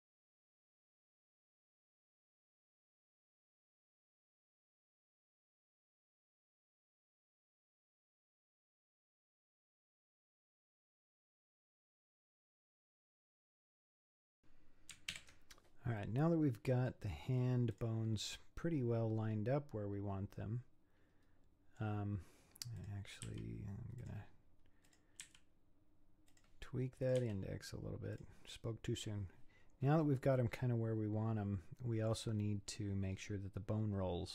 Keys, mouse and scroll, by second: 0.0-0.9 typing, 0.1 click, 0.4 click, 1.1 middle click, 1.3 alt+h, 1.5 click, 1.6 click, 2.1 a, 2.2 c, 2.9 h, 3.0 middle click, 3.2 click, 3.3 middle click, 3.5 alt+h, 3.9-6.2 typing, 4.0 middle click, 4.2 shift+click, 4.3 middle click, 4.5 click, 4.7 click, 4.9 click, 5.1 middle click, 5.5 click, 6.0 middle click, 6.3 middle click, 6.6 alt+h, 6.7 scroll down 5, 6.8 scroll up 4, 7.1 shift+click, 7.2 shift+click, 7.3-8.7 typing, 7.8 middle click, 8.0 click, 8.2 shift+click, 8.3 middle click, 8.6 click, 9.1 middle click, 9.4 alt+h, 9.5 middle click, 10.2 shift+click, 10.4 shift+click, 10.4-14.0 typing, 10.7 middle click, 10.9 scroll up 3, 11.0 middle click, 11.2 scroll down 2, 11.2 scroll up 1, 11.3 click, 11.6 alt+h, 11.9 click, 12.3 click, 12.4 middle click, 13.0 click, 13.5 middle click, 14.1 click, 14.3 middle click, 14.4-15.1 scroll down 5, 15.1 alt+h, 16.0-17.3 middle drag, 17.3-17.7 scroll up 3, 17.7 click, 18.5-21.3 middle drag, 22.8 click, 23.3 g, 24.9 click, 25.2 g, 27.1 click, 27.2 g, 30.4-32.5 middle drag, 32.5-33.1 scroll down 4, 33.1-34.3 scroll up 4.